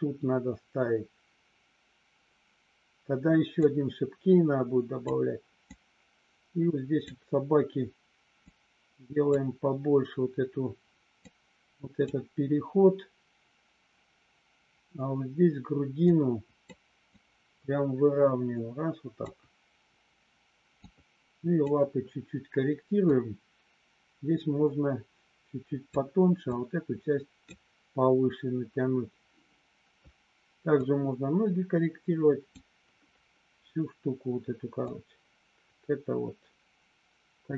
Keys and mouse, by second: 3.6-5.0 drag, 5.8-7.0 drag, 8.4 click, 11.2 click, 16.1 click, 17.1-19.1 drag, 20.9 click, 23.1-25.9 drag, 26.5 click, 30.9-32.5 drag, 34.9-37.5 drag.